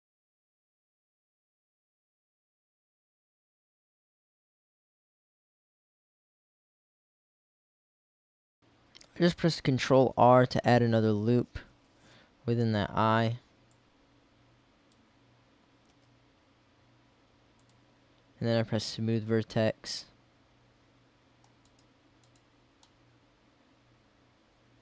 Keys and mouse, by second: 0.4 Tab, 0.9 z, 2.2 Tab, 3.0 ctrl+r, 4.0 click, 7.9-10.5 drag, 13.9-15.5 drag, 16.0 s, 17.8-18.9 drag, 19.2 middle click, 20.2 middle click, 20.7 middle click, 22.9 middle click, 23.2 middle click.